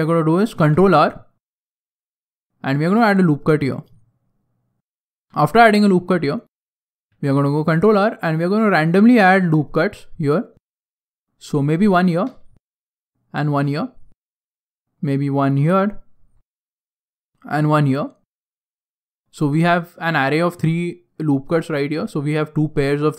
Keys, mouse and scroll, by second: 0.5 ctrl+r, 5.2 middle click, 5.6 shift+middle click, 6.0 middle click, 7.0 ctrl+r, 12.4 ctrl+r, 14.2 ctrl+r, 19.2 right click, 19.2 click.